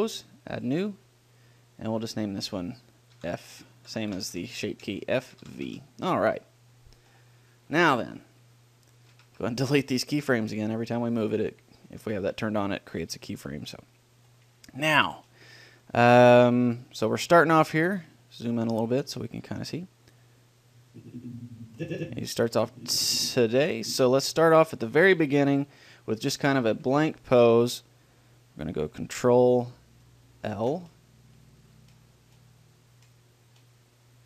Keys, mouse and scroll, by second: 2.0-5.9 drag, 9.4 a, 9.6 a, 10.4 Delete, 13.3-14.4 middle drag, 14.4-16.3 drag, 16.3-20.3 middle drag, 20.3-22.0 drag, 24.1-28.7 drag, 26.6 a, 27.0 a, 30.8 ctrl+l.